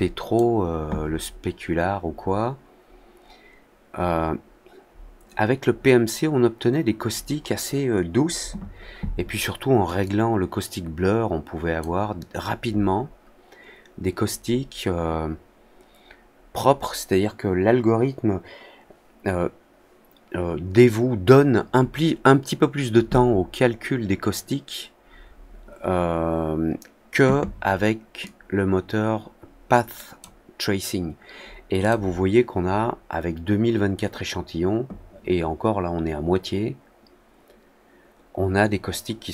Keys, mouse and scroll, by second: 10.0 click, 28.2-30.1 drag, 31.7 click.